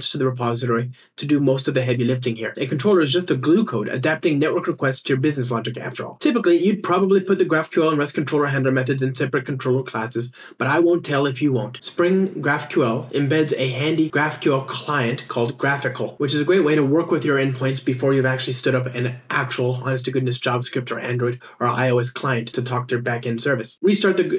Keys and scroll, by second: 7.8 Return, 11.9 shift+super+o, 16.1 ctrl+r.